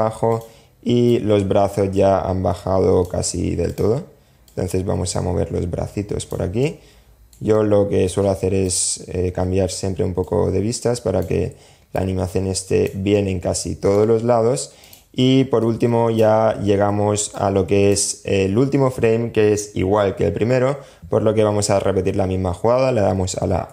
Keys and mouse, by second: 0.2-2.3 drag, 2.8 click, 3.6-5.5 drag, 5.8-6.5 shift+middle drag, 6.7-8.0 middle drag, 9.4-10.4 drag, 11.1 click, 12.3-13.1 drag, 14.0 click, 14.8 click, 16.5 click, 22.9 a.